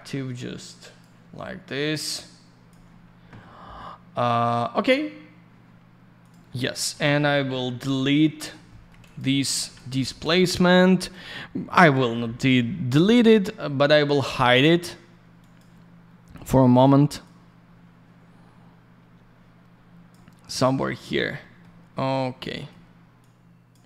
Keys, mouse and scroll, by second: 0.3 click, 1.9 click.